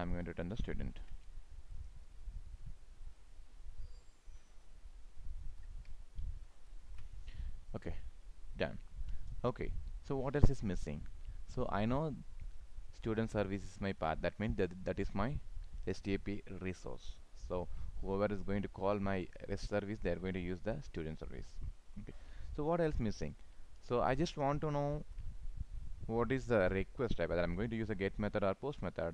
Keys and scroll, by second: 0.8 ctrl+c, 5.4 ctrl+v, 6.4 ctrl+s, 25.0 ctrl+s.